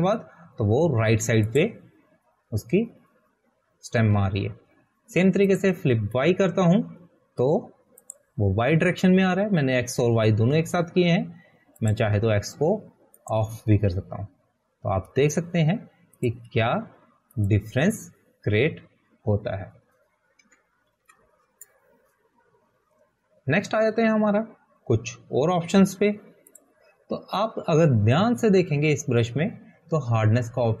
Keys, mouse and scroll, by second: 7.9 click, 11.7 click, 14.2 click, 15.8 click, 18.6 click, 22.5 click, 23.0 ctrl+a, 23.4 Delete, 29.0 click.